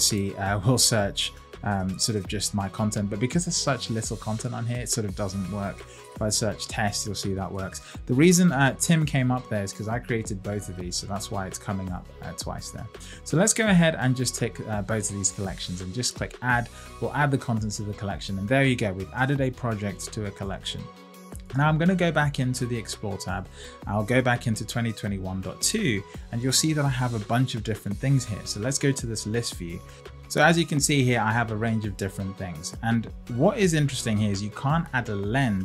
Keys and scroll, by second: 1.7 Return.